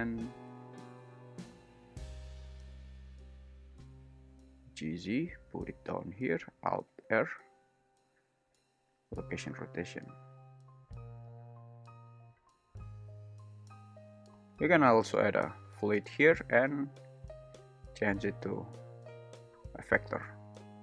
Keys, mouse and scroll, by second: 0.2 shift+l, 2.6 g, 4.1 Escape, 4.4 g, 4.7 z, 8.5 alt+i, 9.5 space, 15.9 click, 17.0-19.8 drag.